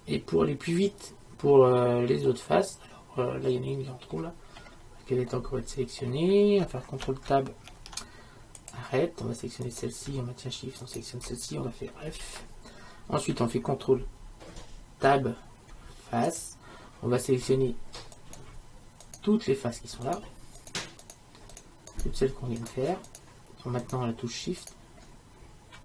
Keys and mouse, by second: 2.3-4.9 middle drag, 7.7 ctrl+Tab, 12.1 f, 15.1 ctrl+Tab.